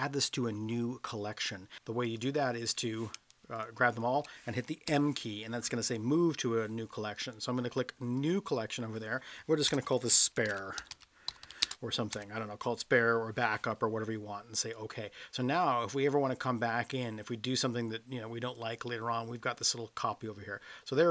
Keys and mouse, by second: 1.8 m, 3.5 shift+click, 4.9 m.